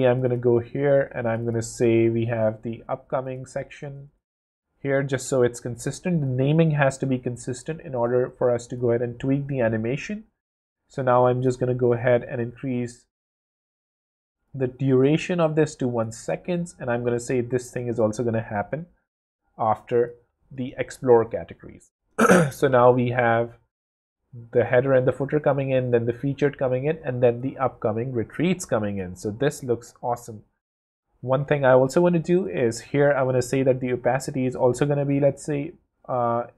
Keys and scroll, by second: 3.6 super+r, 3.8 super+v, 4.0 super+Home, 4.9 Home, 20.1 w, 32.3 0.